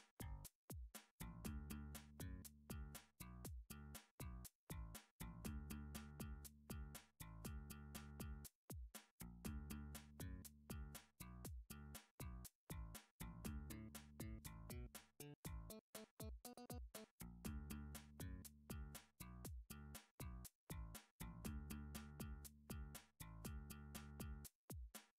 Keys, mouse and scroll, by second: 1.4 click, 1.7 7, 2.3 r, 3.2 click, 3.8 3, 5.7 7, 6.7 r, 7.7 click, 8.1 3, 10.6 7, 11.3 r, 11.9 click, 12.2 3, 14.6 7, 15.9 click, 16.2 3, 17.8 s, 19.0 click, 19.6 s, 20.2 y, 21.8 click, 22.5 g.